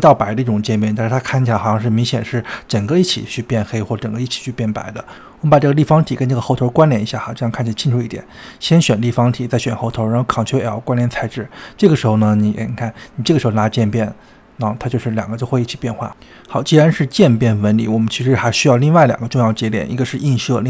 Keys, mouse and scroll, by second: 1.0-4.2 drag, 4.9 click, 5.9 shift+click, 6.6 click, 7.9 shift+click, 9.1 ctrl+l, 10.9 click, 11.7 click, 13.1-16.1 drag, 16.3 click, 17.2 shift+a.